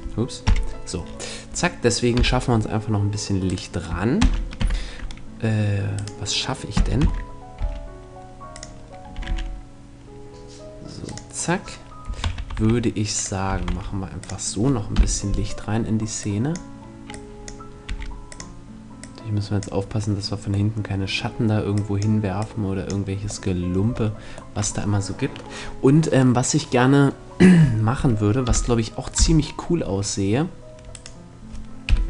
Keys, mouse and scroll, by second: 0.0 F11, 0.0 click, 0.5-3.0 middle drag, 1.7 KP_7, 3.0-4.8 right drag, 3.7 shift+d, 5.6-7.3 right drag, 6.2 g, 8.1-9.8 drag, 8.7 r, 11.2-12.2 drag, 11.6 s, 12.7-15.6 drag, 13.0 s, 14.4 KP_3, 15.8-20.2 drag, 17.4 r, 20.2 middle click, 21.2-23.7 drag, 21.2 middle click, 23.0 middle click, 28.0 KP_7, 28.6 KP_0, 30.5-32.0 right drag, 31.4 KP_7.